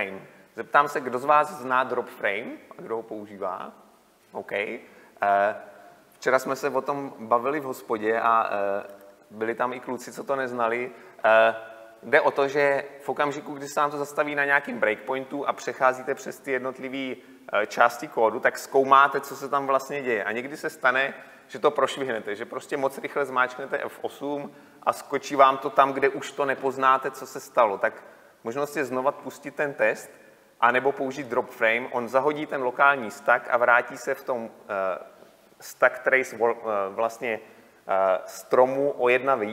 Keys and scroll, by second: 0.1 ctrl+F8, 9.3 shift+F9.